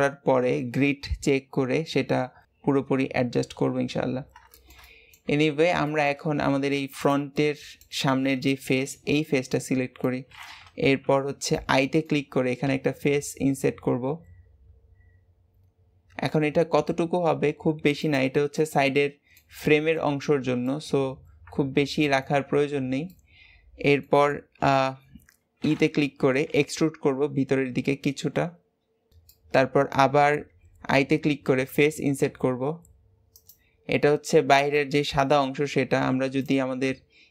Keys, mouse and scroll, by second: 4.2 scroll up 1, 4.4-5.3 shift+middle drag, 5.3 Tab, 5.5 scroll down 2, 5.8-6.9 shift+middle drag, 6.9 click, 7.3 middle click, 8.0-8.4 scroll up 2, 8.4-11.1 shift+middle drag, 11.1-11.5 scroll up 1, 11.5-12.6 middle drag, 18.5-19.6 middle drag, 19.6-19.9 scroll up 1, 19.9-22.8 shift+middle drag, 22.8 scroll up 1, 23.0-26.1 middle drag, 29.2-31.5 middle drag.